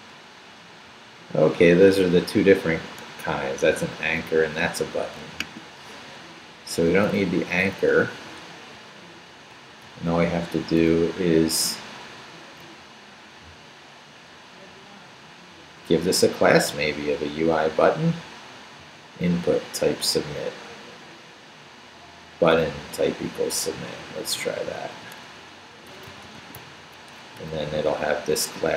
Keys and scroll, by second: 6.9 d, 9.5 Up, 9.8 Right, 17.1 Right, 19.5 Left, 24.0 i, 24.3 BackSpace, 25.7-27.0 typing, 27.4 Down, 27.7 Right.